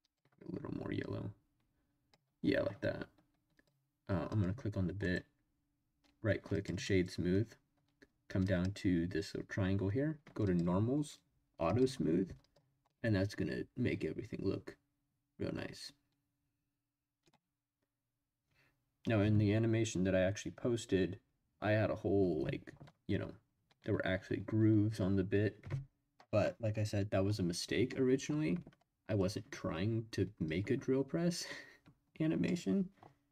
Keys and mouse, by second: 0.1 click, 3.5 click, 4.3 click, 5.0 click, 8.4 click, 10.5 click, 11.6 click, 12.4 click, 12.9-15.6 middle drag, 16.0 middle drag, 16.7 middle click, 30.4 click, 30.7-32.0 middle drag, 32.0 click.